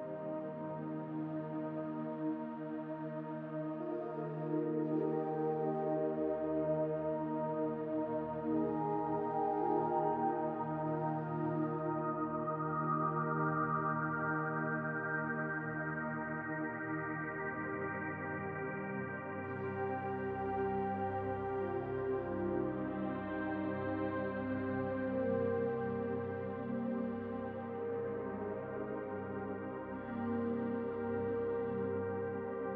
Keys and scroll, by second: 0.6 b, 10.1 s, 22.5 s, 24.3 s, 25.6 s, 27.0 s, 28.0 s.